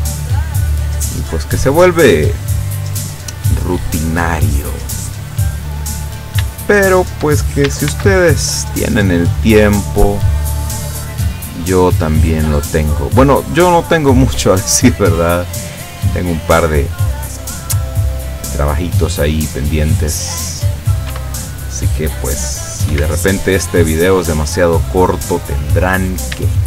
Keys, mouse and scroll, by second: 1.0 click, 1.3 click, 2.7 click, 3.3 click, 4.1 click, 5.1 right click, 5.9 right click, 6.8 shift+right click, 7.9 ctrl+shift+c, 8.4 ctrl+shift+click, 9.5 click, 9.9 click, 10.5 click, 11.1 click, 11.7 click, 12.4 click, 13.1 click, 13.9 click, 14.7 scroll down 2, 15.6-17.3 middle drag, 17.5 scroll up 2, 18.1 right click, 18.4-20.7 middle drag, 21.2 r, 22.9 Escape, 23.5-24.5 middle drag, 24.5 scroll up 2, 26.0 scroll down 2, 26.5 shift+middle click.